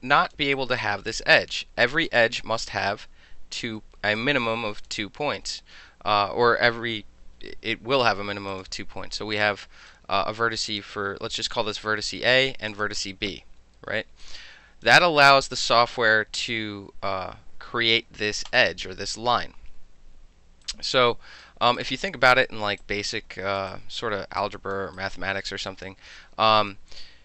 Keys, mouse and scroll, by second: 0.0-0.3 alt+drag, 0.5 alt+right drag, 1.4-2.1 alt+right drag, 2.7 click, 4.2-4.9 alt+drag, 9.3-9.9 right drag, 10.7 click, 12.7 shift+click, 14.2-14.8 drag, 18.5 click, 20.6-21.4 drag, 21.8 click, 22.8 alt+click, 24.9 alt+drag, 25.4 alt+middle drag, 26.1-26.7 alt+drag.